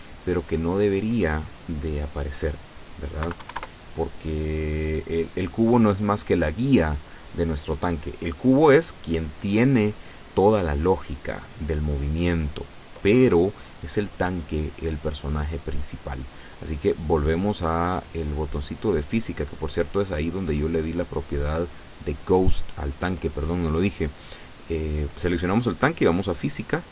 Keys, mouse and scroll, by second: 0.4 right click, 2.4 click, 3.3 KP_Decimal, 3.4 KP_5, 3.6 KP_Enter, 4.5-4.9 scroll up 2, 5.4 right click, 6.0 right click, 10.8 click, 18.7 click, 20.6 right click.